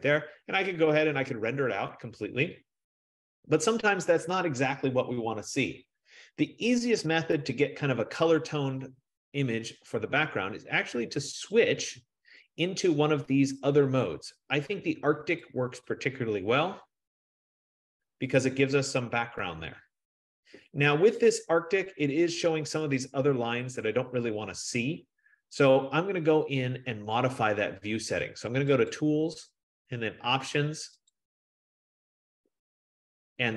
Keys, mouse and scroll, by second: 3.9 F15, 11.7-14.6 drag, 15.7 click, 29.0 click, 31.5 click, 33.3-33.5 scroll.